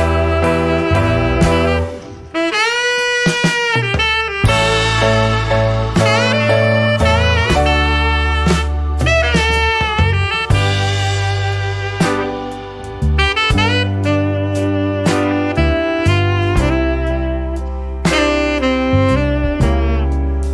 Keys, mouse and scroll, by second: 2.7 shift+8, 4.5-5.8 typing, 7.4-12.0 typing, 16.0-17.3 drag, 17.9 right click, 19.4 click.